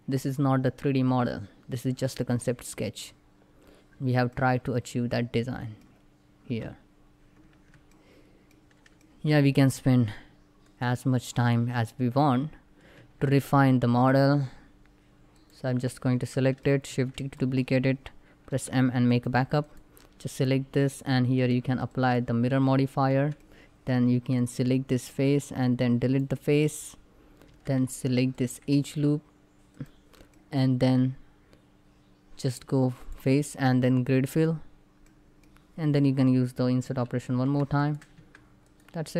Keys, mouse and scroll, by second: 0.7 scroll down 1, 1.7-3.7 middle drag, 3.7 scroll down 1, 4.0-5.5 middle drag, 5.5 scroll up 1, 7.2 Tab, 7.6 middle click, 10.3 click, 12.6 Tab, 15.0 click, 15.4 scroll down 1, 16.0 middle click, 16.6 shift+d, 16.9 right click, 18.2 m, 18.7 click, 22.6 scroll up 1, 22.8 Tab, 23.0 middle click, 23.6 scroll up 1, 23.8 3, 24.1 click, 25.1 x, 25.7 click, 27.1 2, 28.0 alt+click, 30.0 middle click, 32.6 click, 34.7-36.6 middle drag, 37.4 shift+click, 37.9 Tab, 38.4 click, 38.8 middle click.